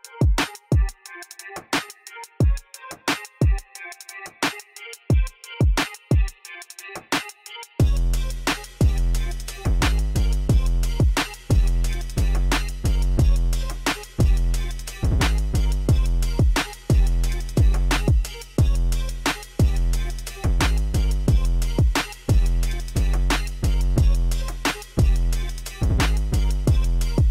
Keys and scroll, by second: 1.3 ctrl+a, 1.8 Tab, 3.7 o, 4.0 g, 4.5 z, 5.8 g, 5.9 x, 7.1 alt+a, 7.7 c, 8.3 3, 9.3 Return, 9.8 g, 10.1 z, 11.8 alt+a, 12.1 c, 13.5 Return, 14.1 g, 14.2 z, 16.2 Tab, 16.9 Tab, 17.2 alt+a, 17.5 c, 19.2 Return, 19.5 g, 19.6 z, 22.2 alt+a, 22.7 c, 25.8 Return, 26.4 s, 26.9 z.